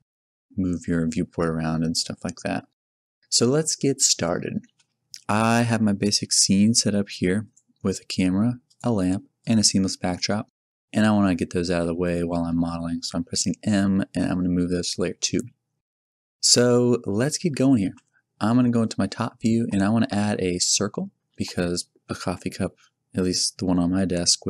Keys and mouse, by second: 8.6-10.1 drag, 11.7 m, 17.8 KP_7, 21.3 shift+a.